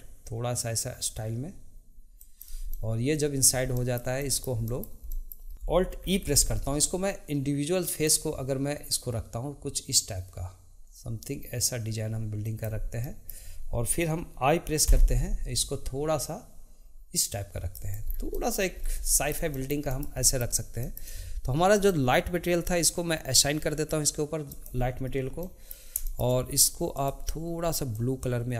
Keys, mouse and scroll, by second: 2.7 middle click, 6.0 alt+e, 13.0 middle click, 18.0 scroll down 2, 18.3 middle click, 18.8 scroll up 2, 19.2-21.7 shift+middle drag, 21.7 click, 24.5 click, 25.4-26.9 middle drag, 26.9 click.